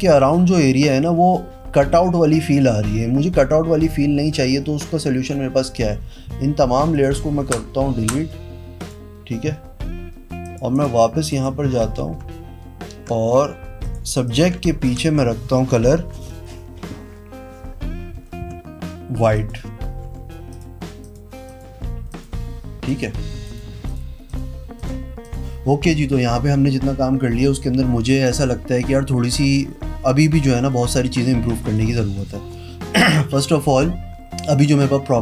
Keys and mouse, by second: 6.9 click, 7.3 Pause, 7.9 Pause, 8.7 click, 10.3 click, 10.7 click, 11.2 click, 13.8 click, 14.2 click, 14.8 ctrl+shift+n, 14.9 KP_Enter, 18.4 i, 19.3 click, 20.0 b, 20.4 click, 20.9 click, 21.4 click, 22.0 click, 22.8 click, 23.4 click, 23.8 click, 24.2 click, 24.7 click, 25.2 click, 31.7 click, 32.0 click, 32.4 click.